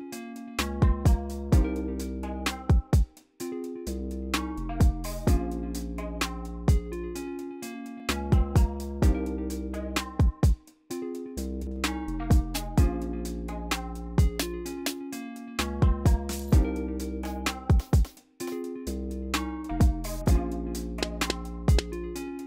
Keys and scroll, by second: 2.1 alt+super+s, 2.7 y.